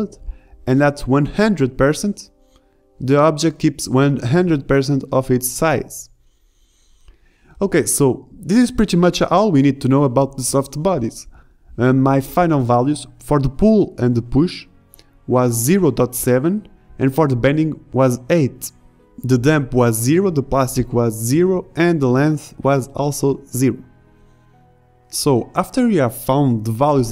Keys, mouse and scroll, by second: 0.0 shift+Left, 0.4 alt+a, 8.9 alt+a, 11.9 middle click, 12.1 alt+a, 15.0 alt+a, 21.3 shift+Left, 24.7 KP_1, 26.2 KP_5.